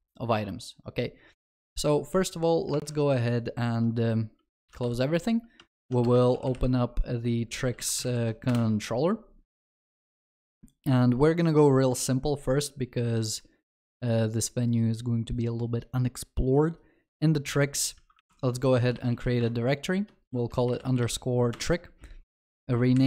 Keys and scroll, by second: 4.9 alt+w, 5.8 ctrl+shift+n, 18.3 alt+Insert.